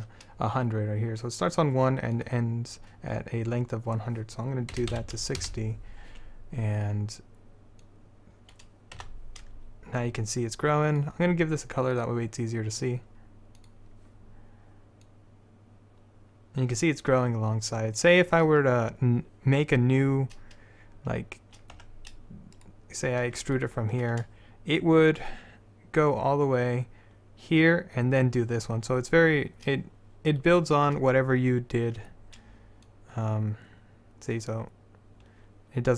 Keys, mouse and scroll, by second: 2.3-6.7 drag, 8.0-10.9 drag, 9.1 z, 15.6-17.1 drag, 21.9 Tab, 22.7-28.9 drag, 23.7-25.1 right drag, 32.1 Tab, 33.0 click, 34.2-35.3 drag.